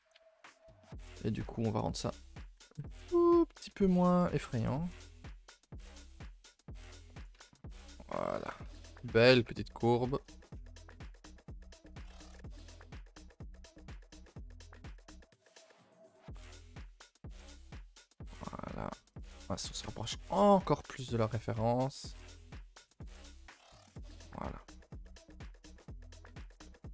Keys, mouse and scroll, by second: 0.2 shift+middle drag, 0.4 scroll up 1, 0.6 Tab, 0.9 Tab, 1.2-2.3 middle drag, 2.3-2.6 scroll up 1, 2.6 2, 2.9 alt+click, 3.1 middle click, 3.7 KP_7, 4.4 shift+middle click, 4.6-4.9 scroll up 2, 4.9 r, 6.2 g, 7.7 z, 7.9 Tab, 8.1-9.3 scroll down 3, 8.3 a, 9.3 KP_0, 10.0 shift+middle click, 10.5-10.8 scroll up 1, 10.8 Tab, 11.0 middle click, 11.3-11.9 scroll up 5, 11.9 middle click, 12.2-12.6 scroll up 4, 12.6 middle click, 13.2 s, 14.4 g, 16.1 KP_0, 17.1 g, 18.3 Tab, 19.2 z, 19.5 a, 19.6 a, 19.7-20.2 scroll down 3, 21.5-22.3 middle drag, 22.3 KP_0, 22.8 KP_0, 23.0 KP_0, 24.0 KP_0, 24.6 middle click, 24.7-25.0 scroll up 1, 25.0-25.5 shift+middle drag, 25.5 scroll up 1, 25.8-26.4 middle drag, 26.4 scroll up 2, 26.6-26.9 middle drag.